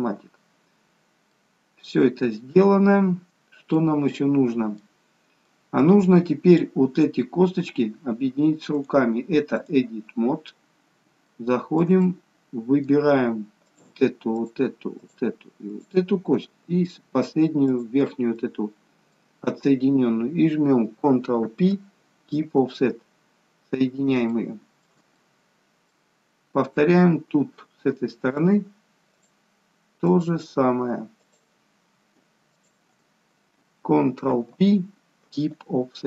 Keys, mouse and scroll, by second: 0.1 ctrl+shift+c, 1.0-1.4 scroll down 1, 1.4 middle click, 3.2-3.8 scroll up 1, 3.8 middle click, 5.1-5.5 scroll down 1, 5.5 middle click, 8.8 click, 10.7 scroll up 2, 11.2 shift+middle click, 12.0 middle click, 13.6 shift+click, 15.0 shift+click, 18.4 middle click, 21.4 ctrl+p, 23.3-23.9 scroll down 2, 24.3 scroll down 1, 24.4 shift+middle click, 25.2 middle click, 26.4 scroll up 3, 27.0 middle click, 28.4 shift+click, 34.3 ctrl+p.